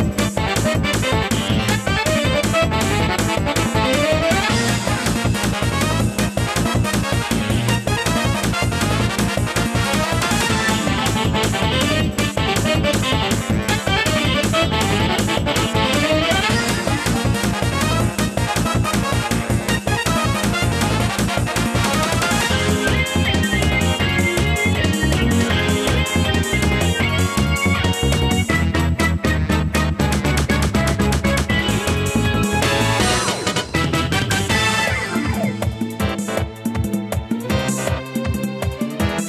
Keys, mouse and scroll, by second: 4.7 Tab, 9.3 Tab, 10.3-11.9 scroll down 1, 12.3 scroll down 1, 13.0-13.9 scroll down 4, 13.9 click, 15.0 shift+click, 16.7 x, 22.5 click, 31.3-31.7 scroll up 2, 32.7 click.